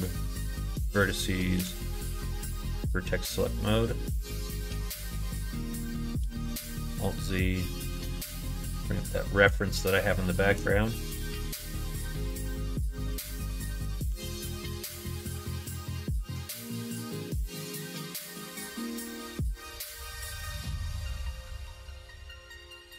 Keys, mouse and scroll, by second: 1.5 s, 6.4 alt+z, 9.9 shift+middle click, 19.0 r, 20.2 a, 21.6 r.